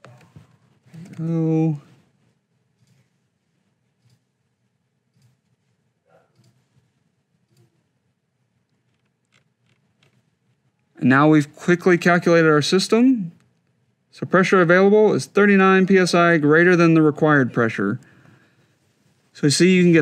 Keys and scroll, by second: 1.0 shift+c.